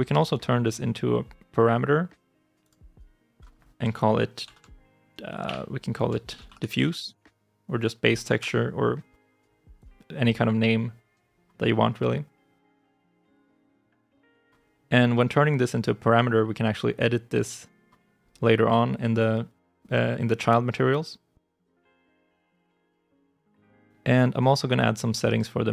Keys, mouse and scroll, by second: 4.3 shift+t, 5.3-7.4 typing, 8.2 Return, 11.8 right click, 24.2 right click.